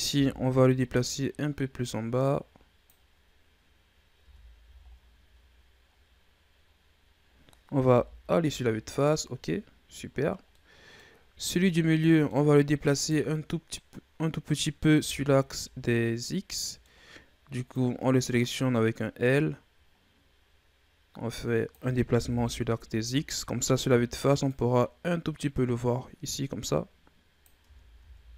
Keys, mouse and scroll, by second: 0.0 l, 1.0-4.0 drag, 4.1 Tab, 4.5 a, 4.7-5.8 scroll down 4, 5.8-6.6 scroll down 5, 6.6-7.8 scroll up 7, 7.8 KP_1, 8.9-9.8 scroll down 9, 9.8-10.3 scroll up 6, 10.4-11.0 middle drag, 11.0-11.5 scroll up 2, 11.5 Tab, 12.0 middle click, 12.3-12.8 scroll up 2, 12.8 right click, 14.9 l, 15.3 scroll down 1, 15.5-17.6 middle drag, 17.6-20.8 drag, 22.2 KP_1, 24.4-27.5 drag, 27.5 Tab, 27.9 a, 28.2 a.